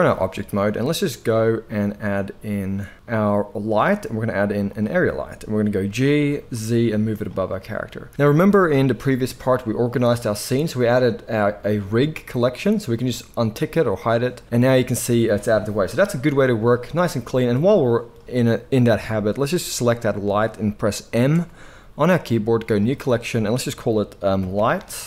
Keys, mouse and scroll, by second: 0.4 shift+a, 5.9 g, 7.2-13.9 middle drag, 13.9 click, 14.0-17.9 middle drag, 17.9-25.0 drag, 21.3 m.